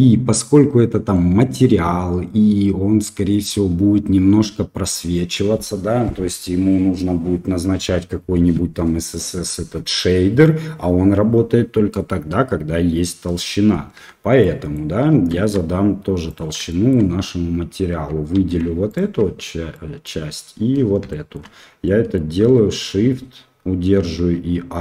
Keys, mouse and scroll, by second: 1.2 middle click, 13.9 Tab, 14.4 middle click, 16.6 shift+middle click, 18.3 2, 18.8 alt+click, 19.7 middle click, 21.0 shift+middle click, 21.8 middle click.